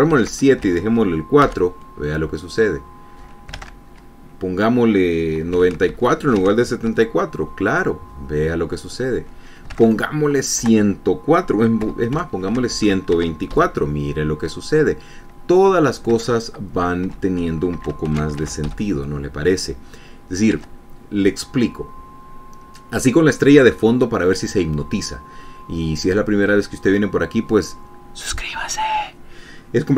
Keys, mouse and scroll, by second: 0.7 ctrl+s, 1.3 ctrl+alt+Tab, 2.0 F5, 4.3 alt+Tab, 6.1 KP_9, 6.5 ctrl+s, 7.0 ctrl+alt+Tab, 7.5 ctrl+alt+F5, 10.4 alt+Tab, 11.2 BackSpace, 12.4 KP_1, 12.7 KP_2, 13.4 ctrl+s, 13.8 ctrl+alt+Tab, 14.1 ctrl+alt+F5, 16.8 alt+Tab, 17.7 BackSpace, 18.3 KP_5, 18.7 ctrl+s, 19.1 ctrl+alt+Tab, 19.2 ctrl+alt+F5, 21.2 alt+Tab.